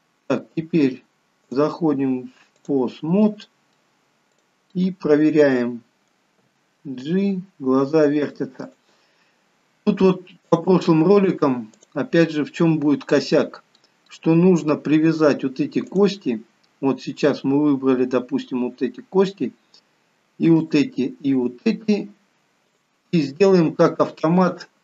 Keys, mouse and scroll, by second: 1.6 click, 3.4 middle click, 4.5 click, 5.0 middle click, 6.6 g, 10.7 click, 12.8 middle click, 14.3 middle click, 16.1 click, 17.2-18.3 scroll down 2, 18.3-19.1 scroll up 2, 20.7 shift+click, 22.9 shift+click.